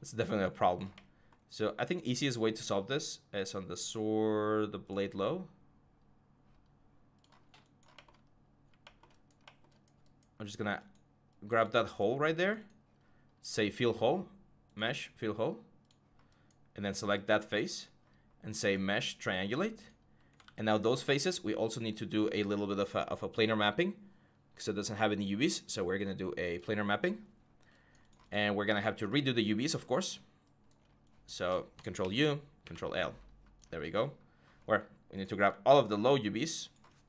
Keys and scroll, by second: 8.0 5, 20.2 ctrl+z, 31.8 ctrl+u, 32.4 ctrl+l.